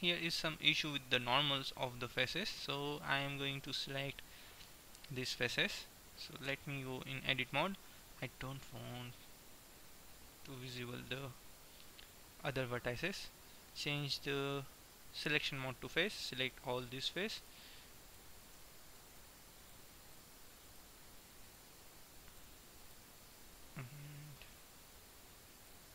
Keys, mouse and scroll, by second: 6.7 Tab, 9.7-10.9 middle drag, 10.9 click, 11.5 middle click, 15.4-17.4 drag, 16.0-17.0 right drag, 17.4-18.5 right drag, 18.5-24.7 middle drag, 25.7-25.9 right drag.